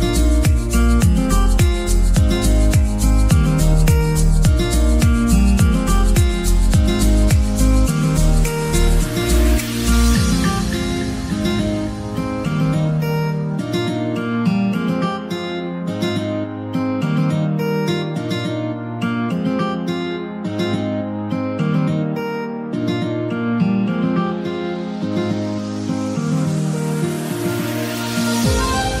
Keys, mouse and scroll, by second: 1.5-3.8 middle drag, 3.8 click, 4.1-4.4 scroll up 3, 4.4 Tab, 4.8-5.3 shift+middle drag, 5.3 alt+z, 6.3-6.9 scroll down 1, 6.9 KP_1, 7.6-8.0 scroll up 2, 8.0 1, 8.5-10.1 shift+middle drag, 10.1 drag, 10.7 click, 10.8 g, 12.3 click, 12.9 s, 17.5 click, 19.9-21.1 scroll down 6, 21.1-21.8 scroll down 8, 21.8-22.4 middle drag, 22.4 alt+z, 22.6-23.0 middle drag, 22.9 Tab, 23.3 middle click, 23.6-24.1 scroll up 3, 24.1 shift+middle click, 24.7 click, 24.9-25.2 scroll up 3, 25.2-26.8 middle drag, 26.7 s, 28.6-29.0 scroll up 9.